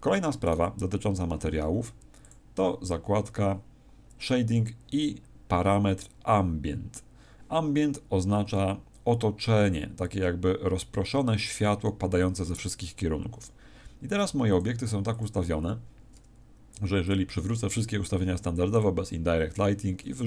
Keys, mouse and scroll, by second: 0.4 right click, 2.2 click, 14.4 click, 15.1 click, 20.1 click, 20.1 right click.